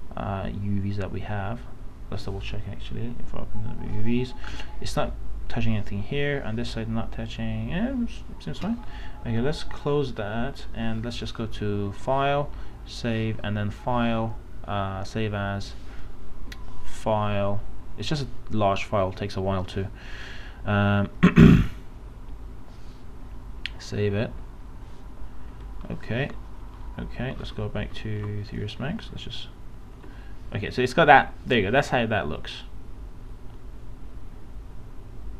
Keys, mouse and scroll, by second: 4.5 space, 4.7 click, 5.3 space, 8.1 space, 9.1 space, 27.9 alt+Tab, 29.0-33.8 alt+drag, 33.8-34.4 scroll down 1, 34.5 scroll up 1.